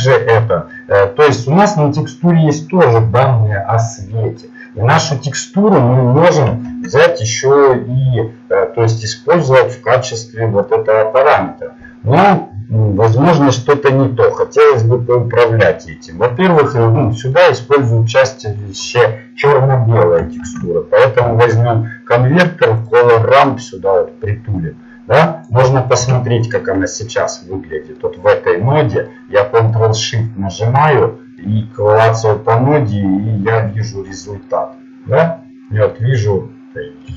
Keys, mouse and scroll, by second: 5.3-11.0 drag, 24.0 shift+a, 24.7-25.9 drag.